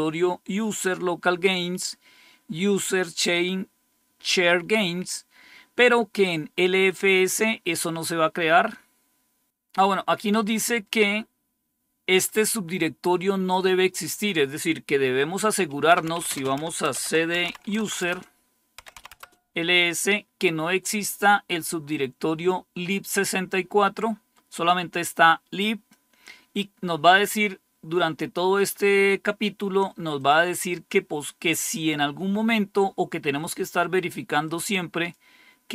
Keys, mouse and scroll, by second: 12.1-15.8 drag, 15.6-19.2 typing, 18.0 Return, 24.9 click, 30.0 click, 34.3 click.